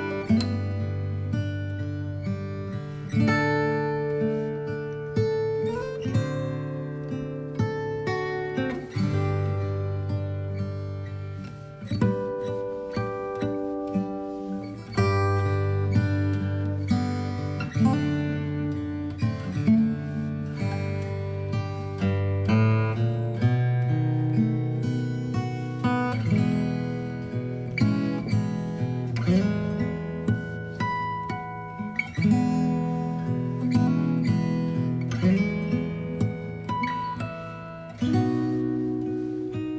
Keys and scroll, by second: 21.3 ctrl+j, 33.7 space, 34.3 alt+space, 35.1 b, 39.5 space.